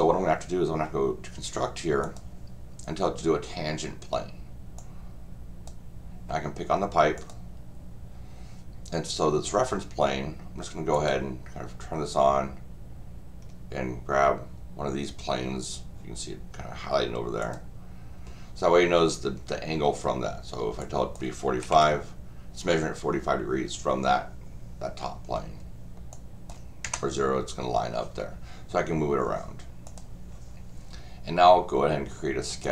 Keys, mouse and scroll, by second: 2.0 click, 4.8 click, 7.2 click, 10.9 click, 17.4 click, 20.8 click, 26.1-26.5 drag, 29.9 click, 32.6 click.